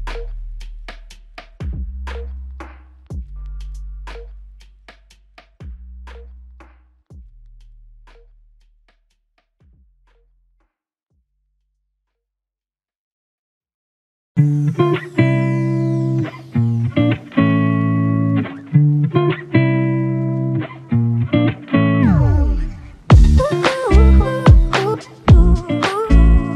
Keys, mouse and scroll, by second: 3.4 ctrl+click, 4.7 ctrl+click, 7.5-8.8 typing, 25.4 double click.